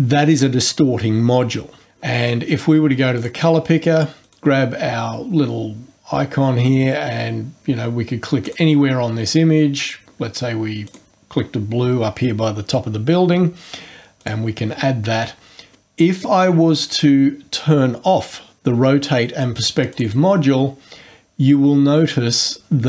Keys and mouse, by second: 3.2 click, 4.3 click, 8.4 click, 10.9 click, 14.2 click, 19.9 click.